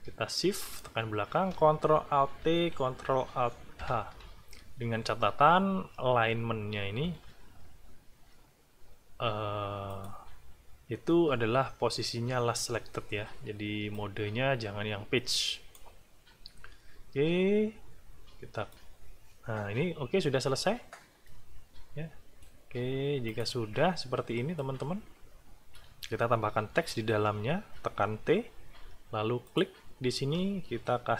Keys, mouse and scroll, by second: 0.6 shift+click, 2.4 ctrl+alt+t, 3.8 ctrl+alt+h, 7.4 ctrl+shift+a, 9.9 click, 13.9-15.9 drag, 18.7 click, 21.2-22.6 drag, 23.3 click, 24.6-25.9 drag, 26.6 t, 29.4 click.